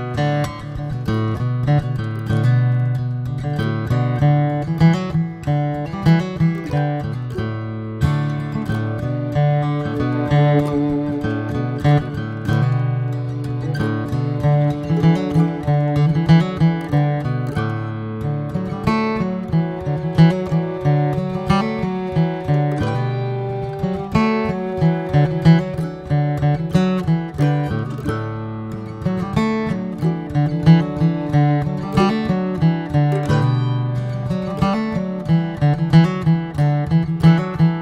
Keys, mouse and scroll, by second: 0.2-1.9 middle drag, 1.9 ctrl+r, 8.3 Tab, 8.4 drag, 8.7 click, 9.2 ctrl+1, 9.5 ctrl+2, 9.9 ctrl+3, 10.2-12.1 right drag, 12.1 drag, 12.5 middle click, 12.9 Tab, 13.5 middle click, 13.7 Tab, 14.3 /, 14.7 drag, 15.0 middle drag, 15.3 scroll up 2, 15.5-17.2 middle drag, 17.2 click, 17.4 scroll down 1, 18.2-19.5 middle drag, 19.5 ctrl+a, 21.0 drag, 21.3-21.8 middle drag, 21.8 scroll up 1, 22.2 drag, 22.6 alt+middle click, 22.9 alt+middle click, 23.8 drag, 24.3-24.9 middle drag, 24.9 drag, 25.2 shift+middle drag, 25.5 click, 25.6 shift+a, 28.5 ctrl+z, 28.7 shift+a, 32.6-37.8 drag.